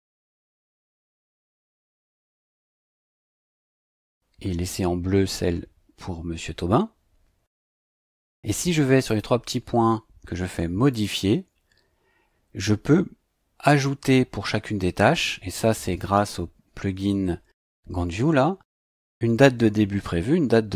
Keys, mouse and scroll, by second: 0.2 click, 1.5 click, 3.0 click, 9.1 click, 10.9 click.